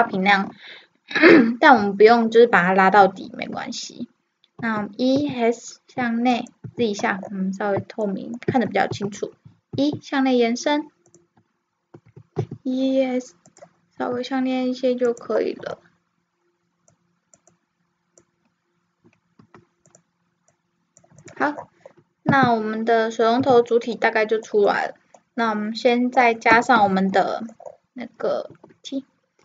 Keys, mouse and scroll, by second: 4.6 e, 6.6 z, 7.2 middle click, 7.3 click, 7.3 middle click, 8.2 middle click, 9.0 middle click, 9.0 e, 9.2 middle click, 9.4 middle click, 12.1 e, 14.0 e, 15.7-16.9 middle drag, 16.9-19.4 drag, 19.4 r, 20.5-23.2 drag, 22.3 Tab, 23.2 middle click, 23.4 z, 26.8 KP_1, 28.6 t.